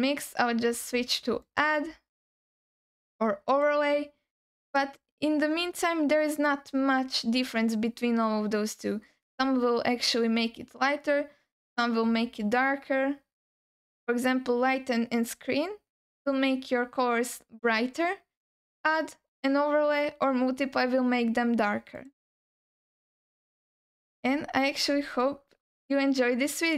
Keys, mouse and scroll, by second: 2.3-3.7 drag, 4.7-22.0 drag, 22.9-24.2 alt+middle drag, 24.4-25.2 scroll down 3, 25.2-26.7 alt+middle drag.